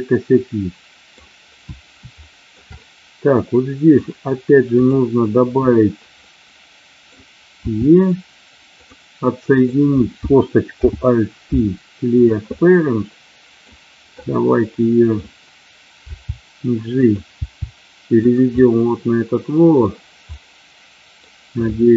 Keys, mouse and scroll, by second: 2.3 shift+middle click, 2.7-3.9 middle drag, 2.7-3.3 scroll up 1, 3.3-3.9 scroll up 1, 4.8 click, 6.2 middle click, 7.6 e, 8.7 click, 9.5 click, 10.7 alt+p, 12.4-13.5 middle drag, 14.2 middle click, 16.1 g, 16.9 click, 17.4 g, 18.5-19.8 middle drag, 20.2-21.2 middle drag.